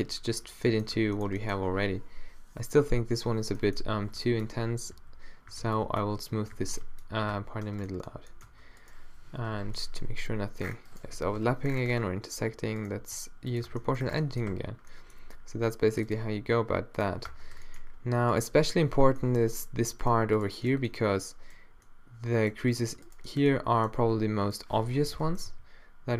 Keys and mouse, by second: 1.0 Tab, 4.0-7.3 typing, 7.6 Tab, 8.0 middle click, 8.5 Tab, 9.6 o, 10.1 g, 11.2 o, 11.5 g, 13.0 g, 13.7 Tab, 14.0 middle click, 14.6 a, 15.3 a, 17.0 click, 17.3 Tab, 18.9 -, 19.2 middle click, 19.6 click, 20.8 click, 21.2 click, 23.2 shift+right click, 24.0 g, 25.0 o, 25.5 g.